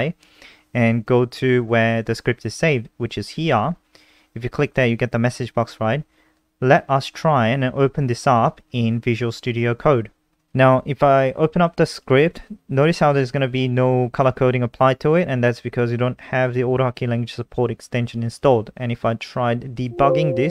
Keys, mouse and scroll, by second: 0.3 click, 1.4 click, 2.5 click, 5.0 click, 6.1 click, 8.6 super+5, 9.6 click, 12.2 click, 13.4 click.